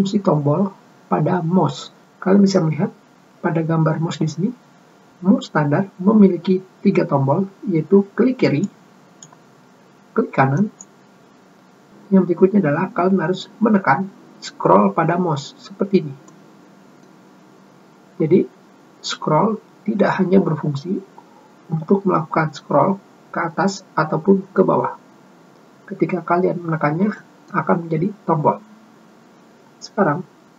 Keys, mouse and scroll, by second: 9.4 click, 11.3 right click, 17.0 middle click, 24.2 scroll up 2, 25.3 scroll down 1, 27.9 middle click.